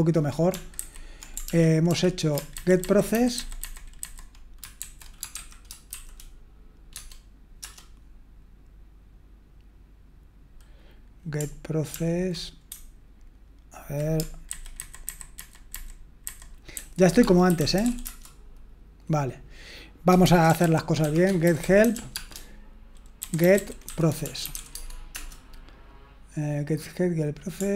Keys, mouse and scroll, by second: 0.7 alt+b, 1.4 ctrl+p, 1.9 ctrl+p, 11.9 ctrl+p, 14.5 alt+b, 14.8 alt+b, 15.0 alt+b, 15.3 alt+b, 15.7 alt+b, 17.4 alt+f, 18.0 space, 20.0-25.0 typing, 25.1 Return.